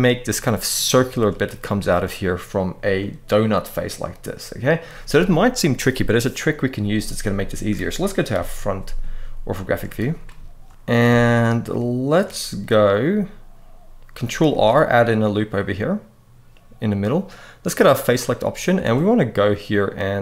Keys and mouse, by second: 0.0 middle click, 0.7 shift+middle click, 2.7 middle click, 7.1 middle click, 8.0 KP_1, 9.4 shift+middle click, 10.8 alt+a, 11.4 shift+middle click, 14.2 ctrl+r, 14.9 click, 17.8 click, 18.5 alt+a.